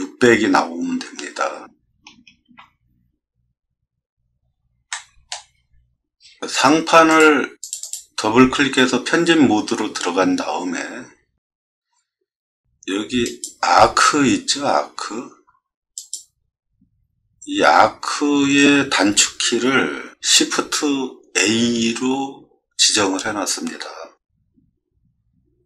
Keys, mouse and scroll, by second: 2.5 space, 4.9-5.3 shift+middle drag, 7.1 click, 7.6 click, 7.8 click, 10.9 middle click.